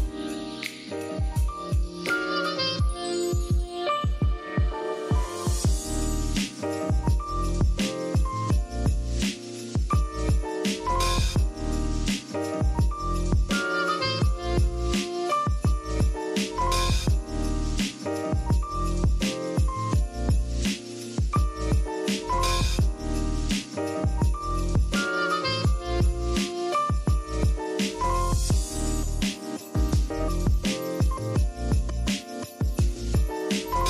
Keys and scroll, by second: 2.1 super+z, 6.4 super+z, 7.6-10.7 typing, 13.2-16.3 typing, 19.5-20.7 typing, 21.1 super+x, 21.3 super+v, 22.1 super+y, 23.7 a.